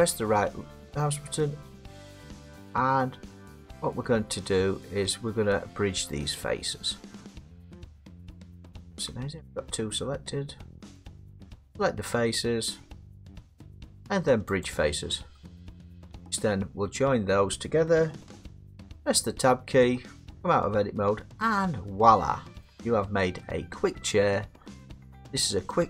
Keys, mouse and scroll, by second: 9.7 middle click, 11.1 right click, 14.6 click, 17.6 middle click, 18.5 Tab, 21.5 middle click, 21.7-22.2 scroll, 22.6 middle click, 22.9-23.4 scroll, 25.3 middle click, 25.7 middle click.